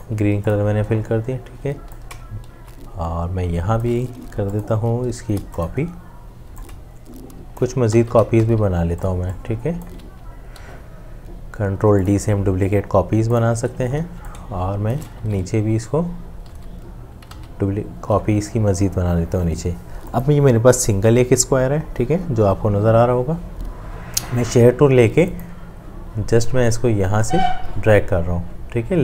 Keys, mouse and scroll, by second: 2.0 alt+click, 5.1 super+space, 6.8 super+space, 7.1 alt+shift+click, 7.8 ctrl+d, 7.8 super+space, 10.6 ctrl+g, 14.3 alt+click, 15.2 ctrl+d, 15.2 g, 16.0 click, 16.5 ctrl+d.